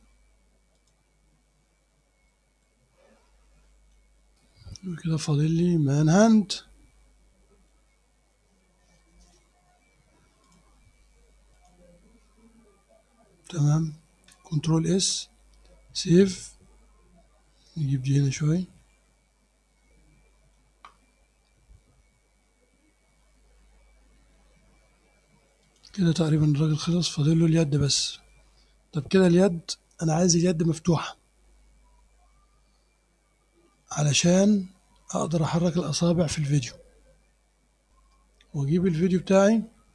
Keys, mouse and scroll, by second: 0.8 click, 1.1-1.8 scroll up 2, 1.8 scroll down 2, 2.0-2.3 scroll up 2, 2.3 click, 2.8 scroll down 2, 3.0 scroll up 2, 3.3 click, 4.2-4.8 scroll up 2, 4.8 scroll down 2, 5.0-5.4 scroll up 2, 5.4-7.9 drag, 10.5 click, 11.6 click, 14.9 ctrl+s, 16.3-20.8 drag, 25.7 click, 26.9-28.1 drag, 29.7 scroll up 1, 33.8 scroll up 1, 39.0 click.